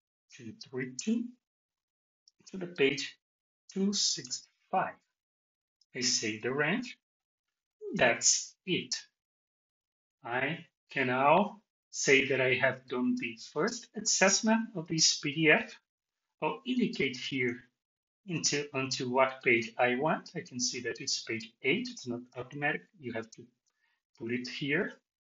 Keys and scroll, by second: 1.6 Tab.